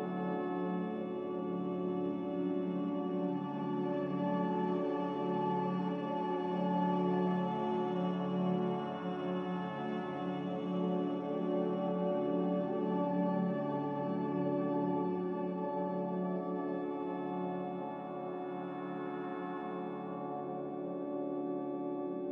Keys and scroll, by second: 2.7 ctrl+c, 2.9 ctrl+v, 7.3 ctrl+c, 7.7 ctrl+v.